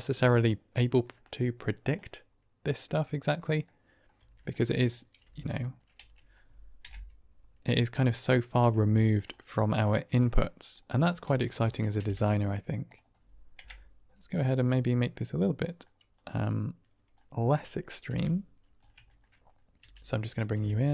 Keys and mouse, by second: 1.9-3.4 middle drag, 3.7 middle drag, 4.1 Tab, 4.5 middle click, 5.1-5.5 typing, 5.9 Tab, 7.1 Right, 8.1-8.6 drag, 8.9 shift+middle drag, 9.2 middle drag, 10.3-10.7 middle drag, 11.2 Tab, 11.6 click, 11.9 g, 12.1 z, 12.8 click, 13.9 Right, 14.5 click, 15.4 middle click, 16.2 click, 17.1 middle click, 18.0 KP_7, 19.0 shift+click, 19.7 g, 20.3 click, 20.4 r.